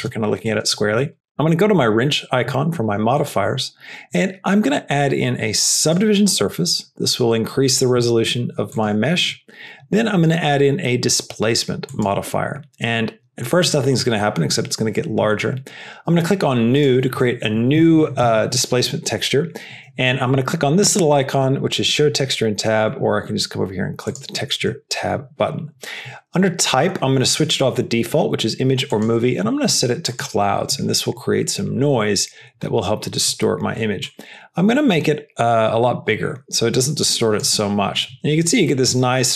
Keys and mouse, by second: 0.0 g, 1.1 g, 3.6-5.9 drag, 9.0-12.2 drag, 24.0-24.4 drag, 28.8-30.1 drag, 33.9-37.4 drag, 38.6-39.3 middle drag.